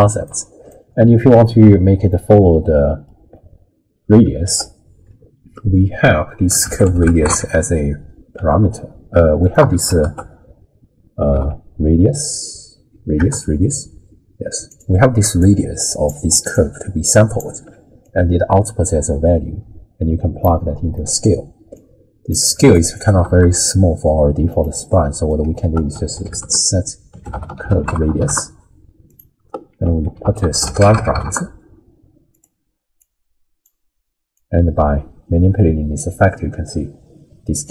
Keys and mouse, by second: 0.3 middle click, 4.4 ctrl+a, 9.6 x, 10.0 ctrl+a, 15.5-16.2 drag, 16.3-17.6 d, 16.5 click, 18.0 click, 19.1-20.5 drag, 21.0 middle click, 21.7 click, 23.3 g, 24.9 click, 25.6 ctrl+a, 29.7 ctrl+a, 33.1-33.6 drag, 34.3-37.7 drag.